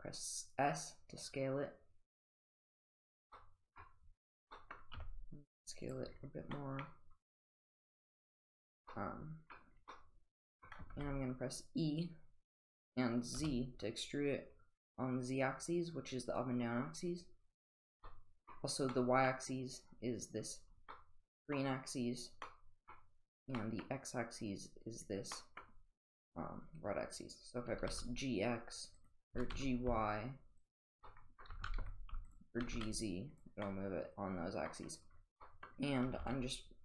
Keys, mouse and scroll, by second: 3.3 middle click, 4.5 middle click, 4.9 s, 6.6 middle click, 8.9-9.5 middle drag, 9.9-10.6 middle drag, 10.9 e, 18.1-18.5 middle drag, 18.9 middle drag, 20.9-21.5 middle drag, 22.4-22.9 middle drag, 23.6 middle click, 25.3 middle drag, 27.7 g, 29.3 g, 31.0-31.4 middle drag, 31.5 g, 32.6 g, 33.6-34.7 middle drag, 35.4 middle drag, 36.1 g.